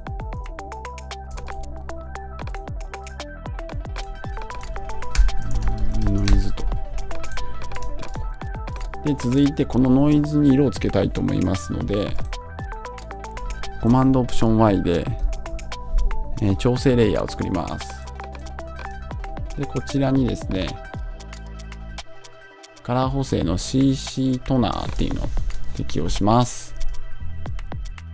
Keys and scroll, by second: 5.0 Return, 6.2 Return.